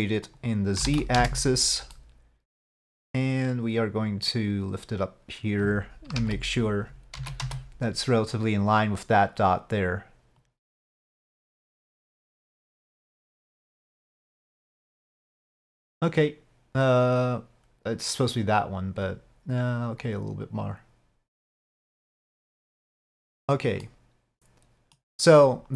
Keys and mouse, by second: 0.3 click, 2.1-2.6 middle drag, 4.1-5.6 drag, 7.3 KP_1, 7.3 z, 10.5-13.3 drag, 14.2-15.8 drag, 20.2-22.5 drag, 24.0-25.1 middle drag.